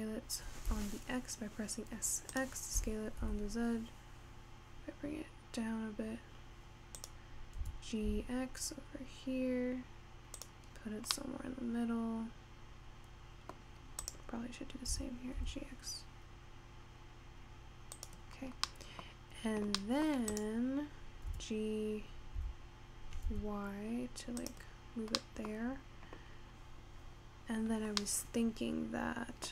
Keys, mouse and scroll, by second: 3.2 s, 7.7 g, 10.8-11.2 scroll down 4, 11.2-14.1 middle drag, 14.1 click, 15.0 g, 18.4-18.8 scroll down 3, 18.8-19.2 middle drag, 19.2 scroll up 4, 19.8-20.3 scroll down 1, 20.3-20.8 scroll up 1, 20.8 click, 21.7 g, 24.9 scroll down 3, 25.2 middle drag, 25.5-28.2 scroll up 3, 28.2-29.5 middle drag.